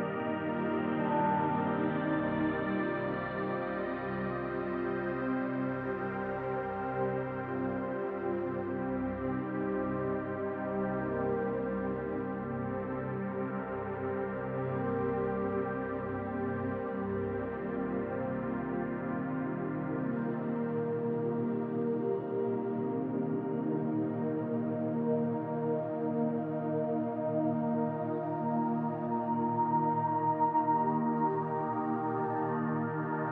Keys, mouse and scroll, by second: 1.4 click, 1.8 shift+click, 2.1 shift+click, 2.4 click, 6.0 ctrl+r, 8.3 click, 8.8 shift+click, 10.0 s, 12.6 click, 13.1 click, 16.0 click, 16.5 click, 17.4 middle click, 18.3-18.7 scroll up 2, 18.8 shift+middle click, 19.4 middle click, 20.0 click, 20.4 middle click, 21.1 shift+click, 22.0 click, 23.1 click, 23.8 alt+click, 25.0 click, 28.0 middle click, 29.0 click, 29.4 shift+click, 29.9 shift+click, 32.6 middle click.